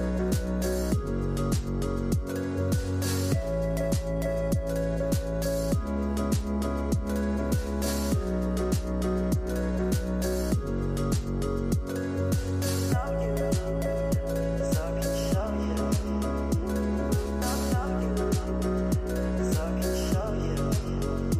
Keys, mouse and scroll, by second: 1.6 Tab, 2.2-3.4 right drag, 3.4-4.0 middle drag, 4.0-4.6 scroll up 5, 4.6-7.9 middle drag, 7.9-10.3 drag, 10.9 click, 11.9-12.4 scroll down 3, 12.4-13.3 middle drag, 13.3 shift+a, 15.6 s, 17.5 click, 18.4-21.3 drag.